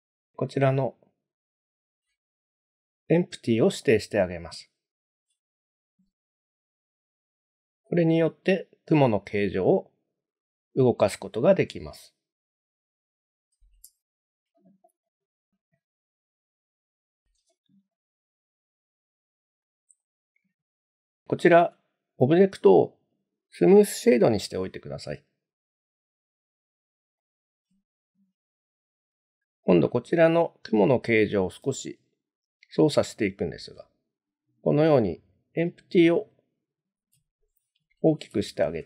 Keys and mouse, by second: 1.4 click, 5.3 click, 6.1 g, 12.8 right click, 14.0-14.3 shift+middle drag, 15.0 click, 16.4-16.7 shift+middle drag, 20.0 click, 20.8-22.2 right drag, 22.8 right click, 27.2 click, 31.0 s, 36.9 ctrl+click.